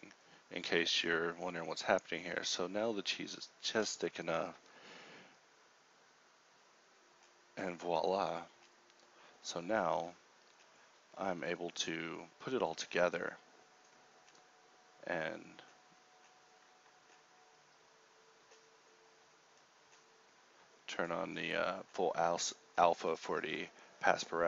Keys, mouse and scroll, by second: 5.5 KP_0, 9.1 KP_Divide, 11.5 KP_0, 12.3 z, 12.7 z, 12.7 n, 13.6 ctrl+Up, 15.7 ctrl+Up.